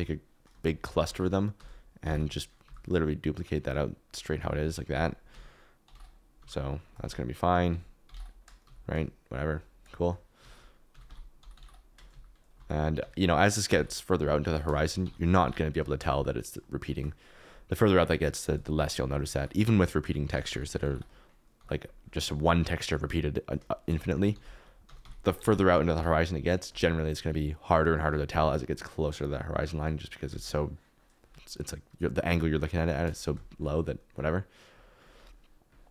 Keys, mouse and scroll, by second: 1.0 alt+d, 1.5 r, 2.0 9, 2.2 0, 2.6 g, 4.4 alt+d, 4.9-6.3 typing, 7.0 alt+d, 7.5-8.6 typing, 10.4 alt+d, 10.9-13.7 typing, 12.6 alt+d, 14.4 Escape, 14.8-16.1 typing, 15.7 click, 19.3 alt+d, 20.3-21.5 typing, 24.0 shift+middle click, 24.3 alt+d, 24.8-25.9 typing.